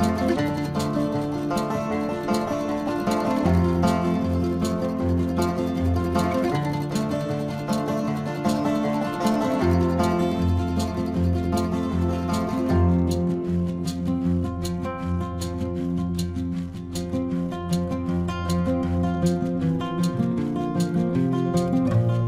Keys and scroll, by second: 0.9 ctrl+=.